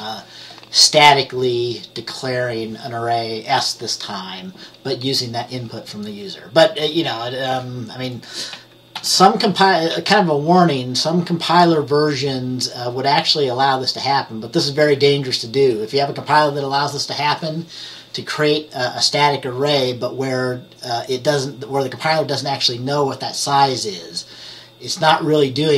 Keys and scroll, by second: 0.0 BackSpace, 9.1 ctrl+s.